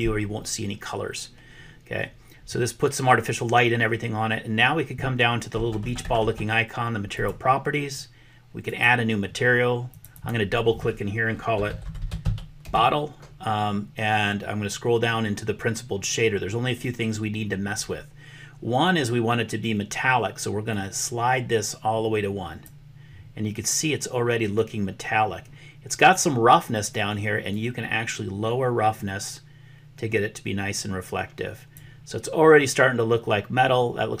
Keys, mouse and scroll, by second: 8.6 click, 9.9 click, 10.1-13.9 drag, 12.0 t, 20.9-22.7 drag, 27.6-31.8 drag.